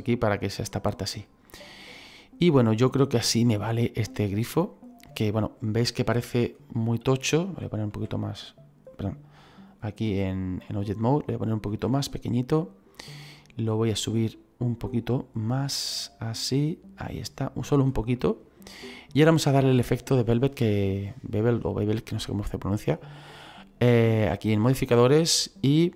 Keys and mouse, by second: 0.6 click, 0.9 middle click, 6.4 click, 7.8 s, 8.8 click, 11.6 s, 12.4 click, 13.6 click, 15.8 click, 18.0 middle click, 24.1 click, 25.2 click.